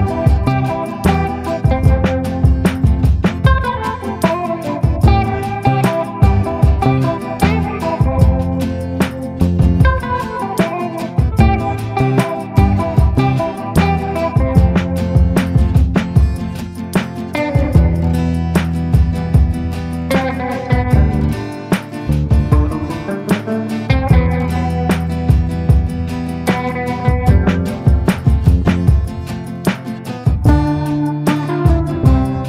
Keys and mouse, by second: 0.1 middle click, 0.7 shift+middle click, 2.3 ctrl+i, 2.9-7.7 typing, 8.5 click, 9.8 ctrl+z, 10.0-11.0 drag, 11.5-13.7 drag, 14.0-15.7 drag, 16.2 click, 16.9 a, 17.8-19.0 middle drag, 19.1 middle click, 20.1 middle click, 21.8 [, 22.3 middle click, 22.3 [, 22.8 ctrl+z, 23.1 click, 23.5 click, 24.0-25.4 drag, 25.5 click, 26.4 [, 26.8 click, 27.1 ], 27.4 ctrl+z, 27.5 ], 27.6 click, 28.8 click, 29.1 click, 29.4 click, 29.8 click, 30.1 click, 30.4 click, 30.6 click, 31.3 ], 31.4 click, 31.8 ], 32.3 click.